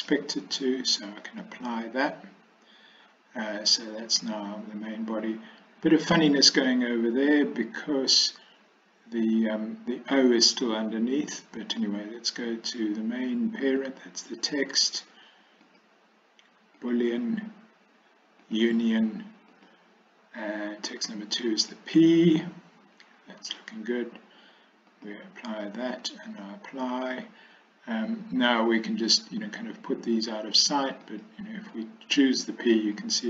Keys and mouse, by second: 0.0-1.6 drag, 15.9-17.0 drag, 18.5 click, 19.7-21.9 drag, 25.0-26.6 drag, 31.2 click, 33.0-33.2 drag.